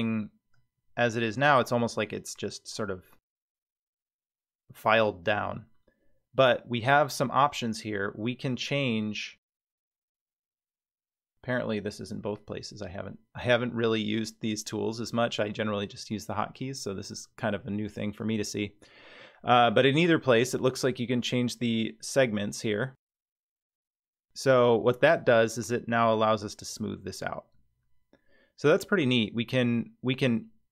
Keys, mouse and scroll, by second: 10.6-13.5 drag, 20.9-24.9 drag, 25.7-26.8 middle drag.